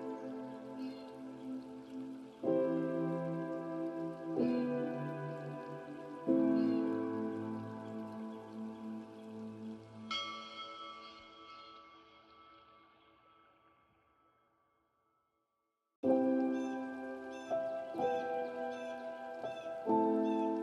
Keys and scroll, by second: 11.1 ctrl+a, 14.3 ctrl+space.